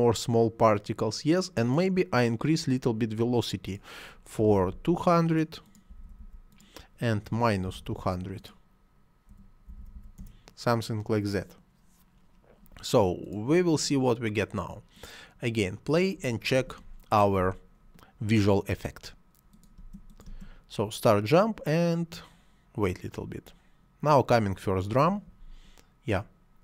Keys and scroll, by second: 4.3 2, 4.4 0, 5.8 2, 5.8 0, 7.1 -, 7.5 2, 7.6 0, 9.2 -, 9.5 2, 9.6 0, 10.0 Return, 19.6 space.